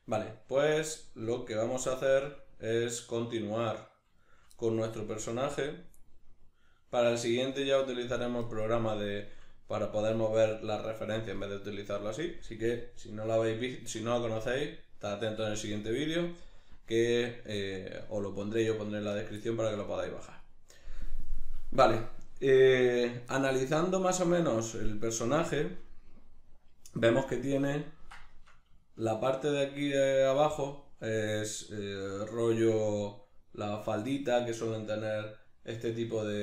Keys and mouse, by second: 1.3 click, 2.1 right click, 3.9-5.3 middle drag, 5.3-8.5 drag, 8.5-36.4 middle drag.